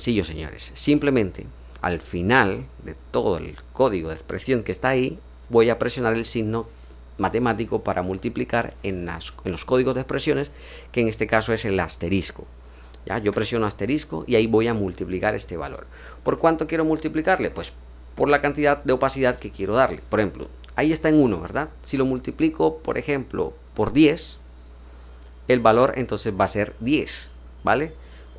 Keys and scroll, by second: 13.2 *.